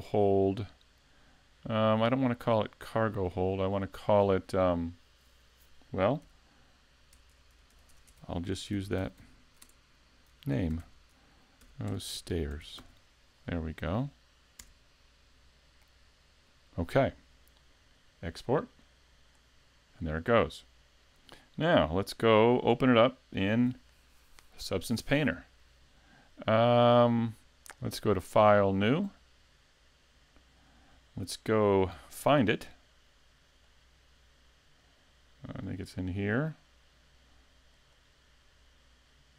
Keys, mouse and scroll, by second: 19.3 click.